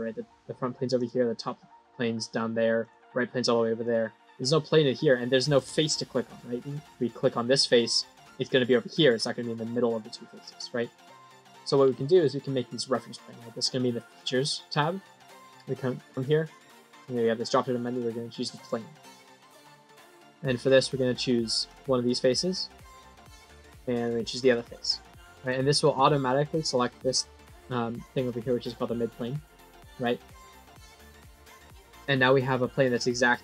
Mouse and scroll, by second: 0.8 click, 2.7 click, 3.7 click, 4.7 middle click, 6.8 click, 10.4 click, 11.1 click, 16.0 click, 18.5 click, 19.7 middle click, 21.6 click, 22.4 middle click, 23.9 click, 24.6 middle click, 30.2 click, 30.9-33.3 scroll down 2, 33.3-33.4 scroll down 1.